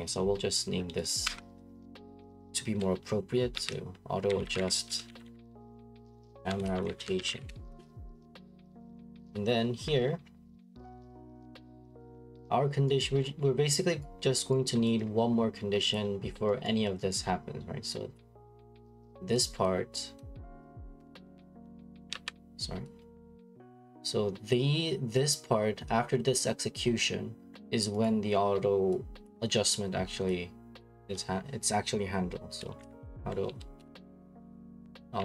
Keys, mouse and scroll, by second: 0.2 click, 1.1 click, 1.2 F2, 3.5-7.9 typing, 9.1 click, 9.3 click, 11.4 click, 11.8 click, 12.0 click, 12.4-13.0 scroll, 13.0 right click, 13.2-14.0 scroll, 14.0 right click, 14.7 right click, 15.9 click, 16.2 middle click, 16.3 middle click, 16.8 right click, 17.1 right click, 17.2 middle click, 17.3 middle click, 18.3 click, 18.9 click, 19.7 click, 20.7 click, 21.5 click, 22.1 ctrl+z, 23.2 click, 23.6 middle click, 23.6 middle click, 25.4 right click, 26.1 middle click, 26.2 middle click, 26.8 middle click, 26.9 middle click, 27.0 middle click, 27.4 scroll, 28.0 right click, 29.3 click, 30.8 click, 31.0 c, 32.4-35.2 typing.